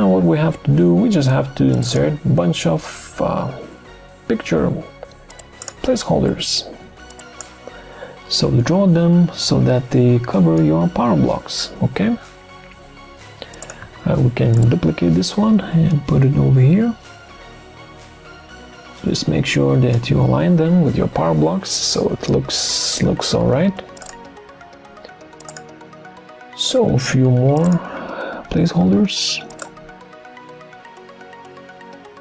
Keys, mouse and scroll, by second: 13.9 ctrl+d.